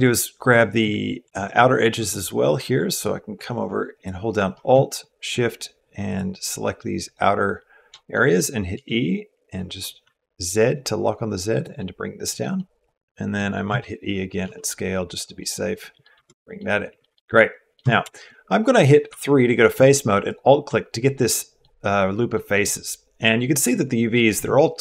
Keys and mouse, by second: 1.2 alt+click, 4.7 shift+click, 7.9 middle click, 8.5 e, 11.6 click, 11.6 middle click, 12.3 middle click, 12.8 middle click, 13.5 e, 15.2 click, 15.6 middle click, 15.8 click, 15.9 Tab, 16.2 click, 16.8 shift+click, 17.1 click, 17.6 Tab, 17.9 shift+click, 18.9 3, 20.1 alt+click, 20.8 click, 22.1 click.